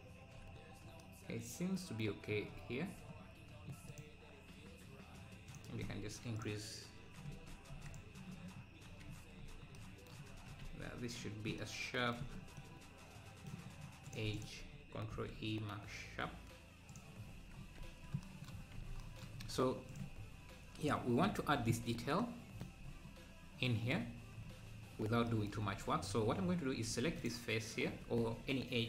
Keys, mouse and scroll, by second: 0.6 scroll up 2, 3.4 scroll down 1, 4.0 click, 8.6 click, 8.6-9.1 scroll down 4, 9.4-9.8 scroll up 2, 10.4 Tab, 11.0-11.6 scroll up 1, 14.2 click, 17.3 Tab, 17.6 scroll down 1, 19.4-19.9 scroll up 1, 19.9-20.6 scroll up 4, 20.6 click, 20.6 KP_Decimal, 20.9 KP_Decimal, 21.1 scroll down 4, 26.4-26.9 scroll up 2, 27.2 Left.